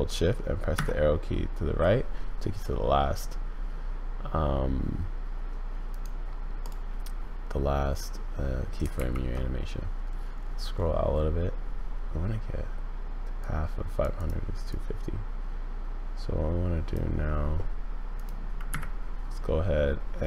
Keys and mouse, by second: 0.7 shift+Right, 5.9 click, 8.9 shift+Left, 13.4 click, 14.2 click, 14.7 click, 18.2-20.2 drag.